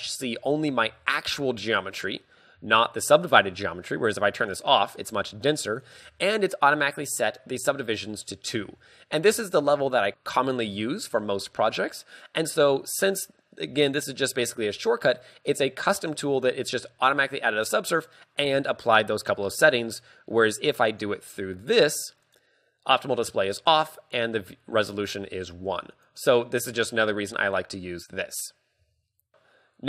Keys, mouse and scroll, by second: 0.5 Tab, 0.6 scroll down 1, 0.9 z, 2.7 z, 9.9 middle click, 22.4 click, 29.3 KP_3.